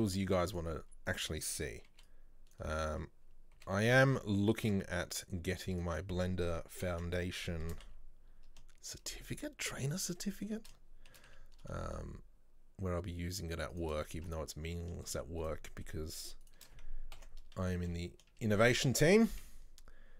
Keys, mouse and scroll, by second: 1.1 right click, 2.0 b, 2.8-3.6 scroll up 1, 3.6 g, 7.7 shift+d, 10.2 shift+middle click, 11.2 shift+d, 14.4-15.5 middle drag, 15.5 shift+right click, 15.7 shift+middle click, 16.5 shift+right click, 17.2 ctrl+l, 17.6 KP_3, 18.7 shift+middle click, 19.3 s.